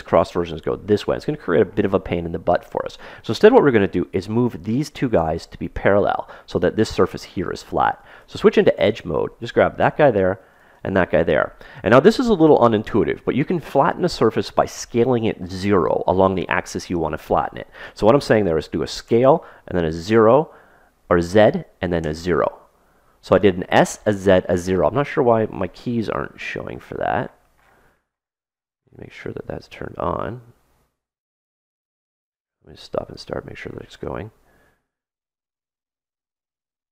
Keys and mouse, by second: 8.1 ctrl+Tab, 9.4-12.4 right drag, 19.0 s, 26.7-30.8 middle drag, 32.7 click, 36.2 ctrl+z.